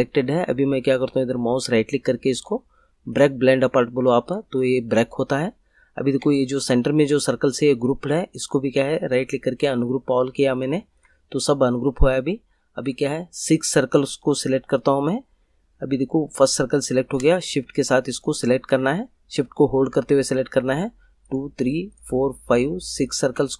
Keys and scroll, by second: 6.5 ctrl+z.